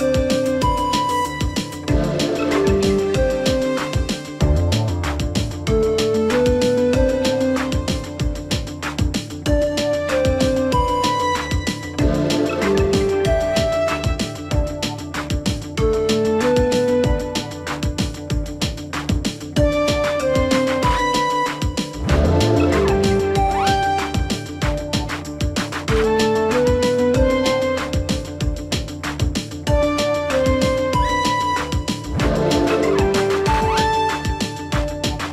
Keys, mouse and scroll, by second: 26.8-35.3 drag.